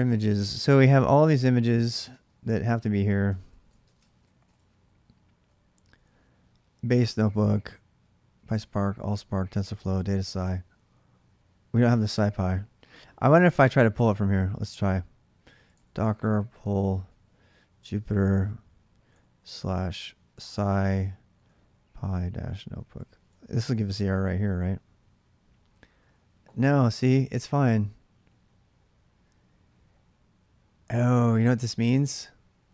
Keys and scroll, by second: 0.0-0.3 typing, 1.9 space, 3.0-4.7 typing, 14.2-24.0 typing.